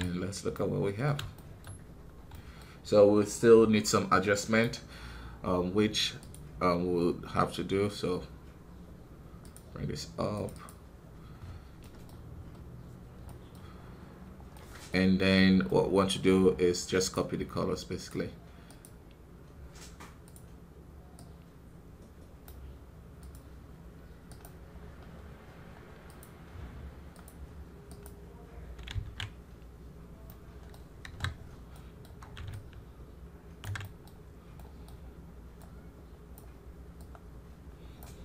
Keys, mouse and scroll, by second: 0.4-2.0 middle drag, 2.0 scroll down 1, 2.2 middle click, 2.5-4.8 scroll up 2, 4.8-6.2 scroll up 1, 6.3-10.5 drag, 18.6 click, 21.0 click, 27.8 click, 28.8 ctrl+z, 30.2 middle click, 30.9 KP_1, 31.3 scroll down 4, 31.6 middle click, 31.9 scroll up 3, 32.4-33.7 ctrl+alt+drag, 33.7-35.6 middle drag, 35.6-38.2 drag.